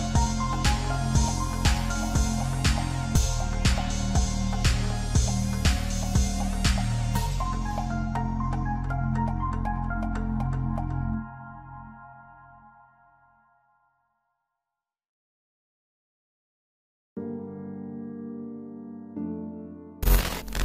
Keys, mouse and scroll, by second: 4.3 right click, 8.9 right click, 13.6 right click.